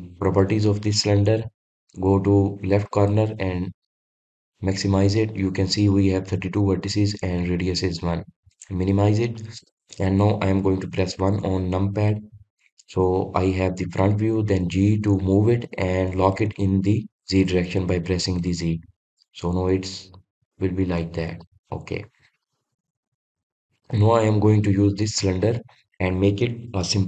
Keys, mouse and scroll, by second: 2.9-6.1 drag, 8.4-9.1 drag, 9.1-9.5 scroll up 2, 9.5-11.0 scroll down 1, 11.1 KP_1, 21.4-22.7 middle drag, 22.7 scroll up 2, 22.9-23.3 scroll down 1, 23.3 click, 23.8 click, 24.2 scroll down 1, 24.3-27.0 middle drag.